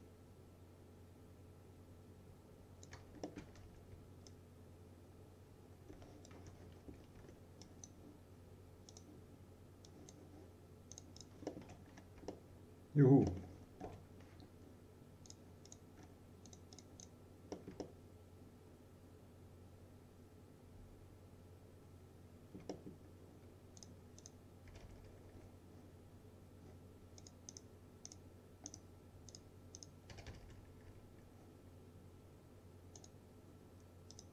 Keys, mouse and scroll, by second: 0.0-3.2 shift+drag, 3.3-4.2 typing, 3.4 alt+middle click, 4.3-6.5 shift+drag, 6.9 F3, 7.2 1, 7.7 click, 11.5 middle click, 11.7 F3, 12.0-12.3 scroll down 1, 12.4-13.3 alt+middle click, 13.7 scroll up 1, 13.9 F4, 14.3-15.3 scroll up 1, 15.3 click, 16.0-16.6 scroll down 1, 16.6 click, 17.6 middle click, 18.2-23.1 alt+middle drag, 23.1-23.8 scroll down 1, 23.8 click, 24.8-25.3 typing, 27.3 click, 30.2-31.1 typing, 33.0 click.